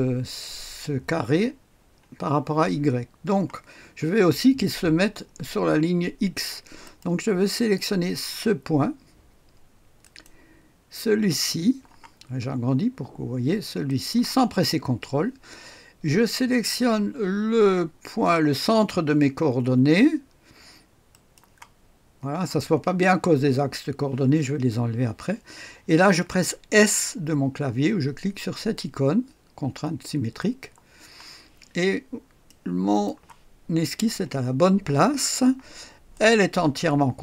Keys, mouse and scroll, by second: 6.8 right click, 10.0 click, 12.2-13.0 scroll up 1, 13.0-13.8 scroll up 1, 13.8 click, 14.5-16.3 scroll down 1, 21.1 click, 30.4 click, 31.8-32.4 scroll up 1, 32.4 right click, 36.1 click.